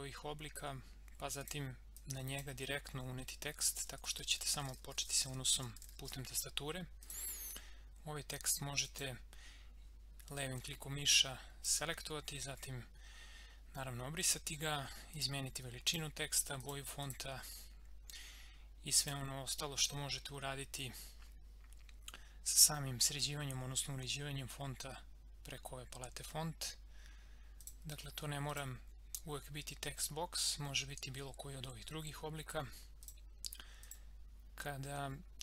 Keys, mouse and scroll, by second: 1.4-3.4 drag, 3.2-6.5 typing, 7.0-15.1 drag, 27.6 click, 33.0 click.